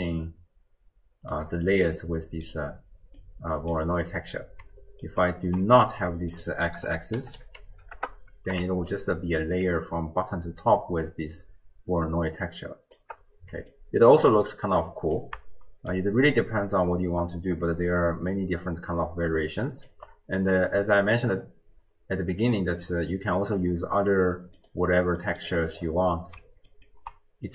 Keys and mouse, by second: 2.0 click, 2.0 middle click, 2.0 right click, 3.3 click, 5.1-5.5 ctrl+alt+drag, 6.4-8.0 drag, 8.9-13.0 shift+drag, 13.7-15.2 drag, 15.9-19.9 shift+drag, 20.7 click, 20.8 middle click, 20.9 click, 22.5 click, 24.6 click, 25.3 middle click, 26.9 ctrl+alt+click.